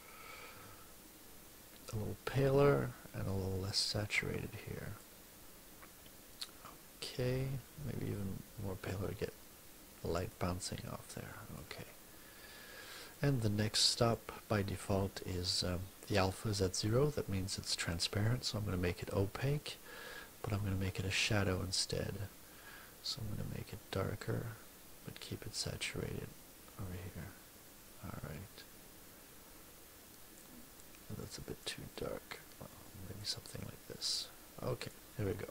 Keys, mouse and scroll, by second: 8.0-10.4 drag, 10.8 click, 13.0-14.2 drag, 16.0-18.1 drag, 20.5-30.5 drag, 31.2 click, 31.8 click, 32.6 click, 33.6-35.0 drag.